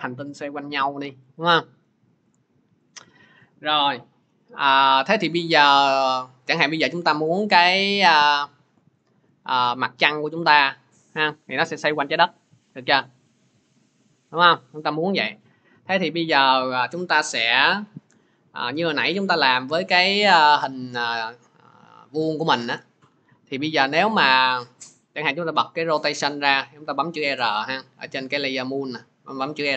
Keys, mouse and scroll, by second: 1.7 middle click, 2.7 click, 6.4 click, 8.2 middle click, 15.2-20.3 drag, 24.5-29.6 drag, 27.1 r.